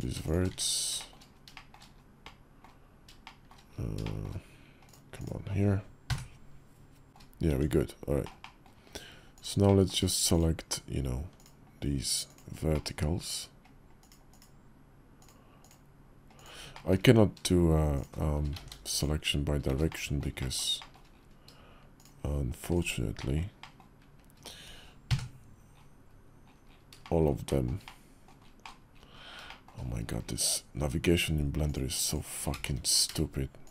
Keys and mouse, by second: 0.3 1, 0.7 shift+click, 1.3 shift+click, 2.0 click, 3.0 shift+click, 3.8 shift+click, 4.6 click, 5.8 KP_Decimal, 7.1 Tab, 7.2 Tab, 8.0 click, 8.2 drag, 9.4 click, 11.2-12.8 shift+drag, 13.7 shift+click, 14.0 shift+click, 15.0 shift+click, 15.4-16.6 shift+drag, 18.3 ctrl+z, 19.5 ctrl+z, 19.6 click, 20.1 shift+click, 20.5 shift+click, 22.5 shift+click, 22.9 shift+click, 23.3 shift+click, 23.5-25.9 shift+middle drag, 24.8 KP_Decimal, 26.7 shift+click, 27.2 shift+click, 27.6 middle click, 28.4 middle click, 29.2 shift+middle click, 31.4 shift+click, 32.3 ctrl+z, 32.5 ctrl+z, 33.4 shift+click.